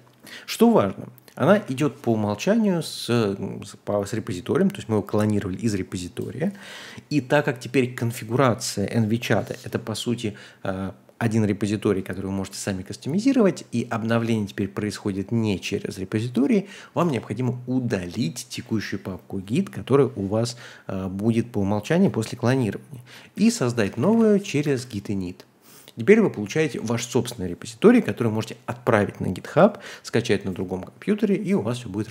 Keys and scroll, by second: 1.4-2.1 typing, 2.3 Tab, 17.0 Return, 23.1-24.8 typing.